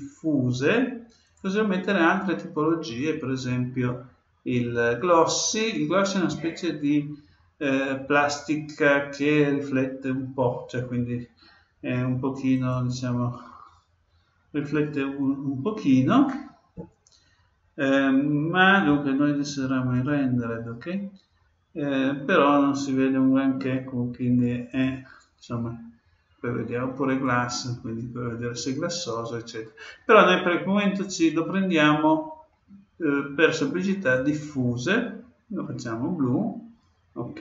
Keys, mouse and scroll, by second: 1.2-3.1 drag, 18.7-20.7 drag, 21.0-23.9 middle drag, 21.0-21.9 scroll up 1, 21.9-22.4 scroll up 1, 22.4-23.0 scroll up 1, 23.0 scroll up 1, 23.2-23.9 scroll down 1, 24.6-26.5 drag, 31.0-32.8 drag.